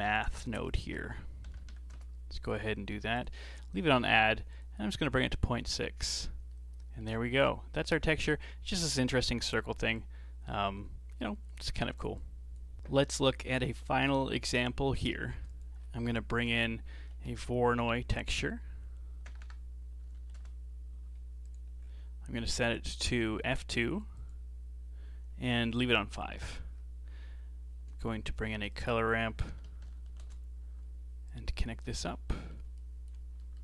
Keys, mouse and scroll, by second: 0.5 shift+a, 2.1 middle click, 3.5-4.5 scroll up 4, 4.5 click, 6.5-8.1 middle drag, 8.1-12.7 drag, 14.2-15.3 scroll up 2, 15.3 shift+a, 19.4 BackSpace, 21.8-22.3 scroll up 4, 22.3 middle click, 22.7-23.5 scroll up 4, 23.5-26.3 drag, 26.3 middle click, 26.7-28.5 scroll down 4, 28.5 shift+a, 30.1 r, 31.6 alt+right click, 32.1 scroll down 2, 32.4-32.8 middle drag, 32.8 alt+right click, 33.4-33.6 middle drag.